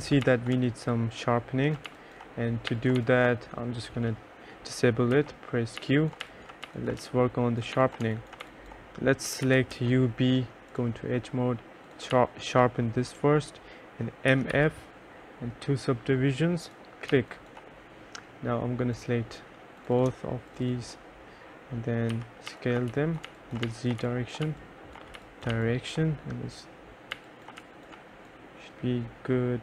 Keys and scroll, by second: 0.4 2, 0.7 3, 2.0 2, 3.1 1, 5.3-9.9 typing, 12.3 2, 14.2-15.2 typing, 17.3 2, 22.0-25.6 typing, 27.8 3.